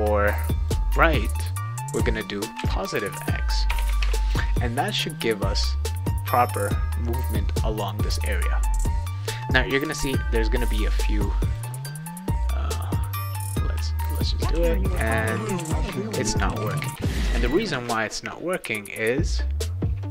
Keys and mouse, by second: 0.1 click, 2.3-3.6 typing, 4.0 ctrl+s, 6.7 click, 11.5 click, 12.7 w, 13.4 click, 13.7-17.8 typing, 19.0 click, 20.0 click.